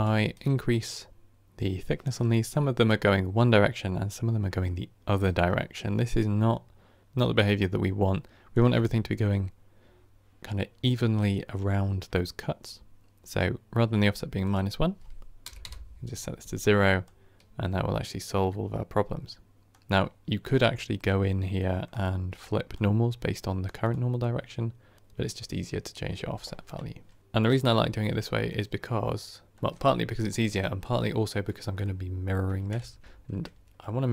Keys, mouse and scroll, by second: 15.5-26.6 drag, 26.6-32.7 middle drag, 32.7 KP_1, 33.0 KP_3.